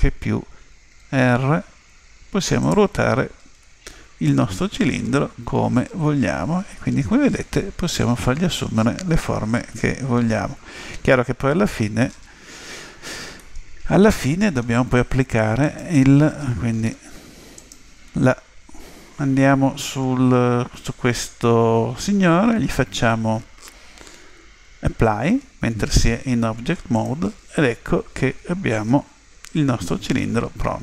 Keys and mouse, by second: 0.8 r, 3.5 z, 4.3-7.0 middle drag, 13.4-15.2 middle drag, 15.6 right click, 16.9 Tab, 17.6 right click, 26.9 click, 28.9 Tab, 30.2 a, 30.7 a.